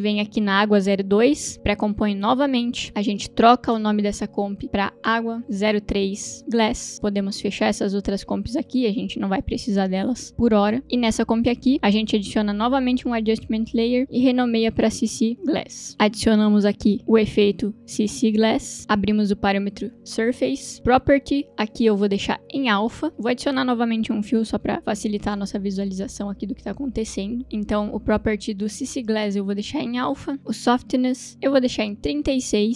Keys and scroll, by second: 3.9 Return, 6.4 s, 7.4 Return, 7.9 Return, 13.7 Return, 14.8-16.0 typing, 17.0 ctrl+space, 17.6-19.0 typing, 24.5-25.4 typing, 25.6 Return.